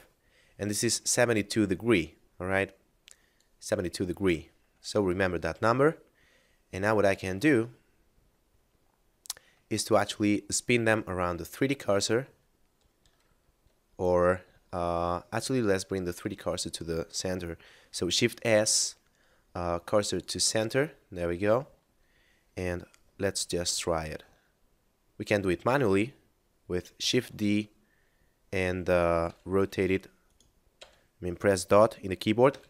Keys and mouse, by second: 3.3 click, 4.9 middle click, 7.2 shift+space, 7.7 middle click, 17.9 shift+s, 20.0 click, 20.9 middle click, 27.0 shift+d, 29.1 r, 30.2 right click, 32.5 r.